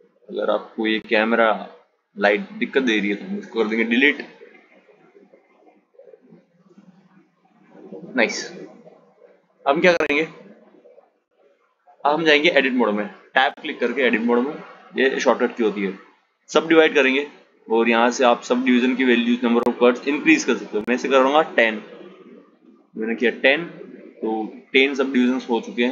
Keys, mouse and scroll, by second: 0.1 click, 3.2 Delete, 4.8 click, 6.0 g, 10.6-12.7 right drag, 12.7 Tab, 13.9-17.0 right drag, 17.3-23.1 drag, 25.6-25.9 drag.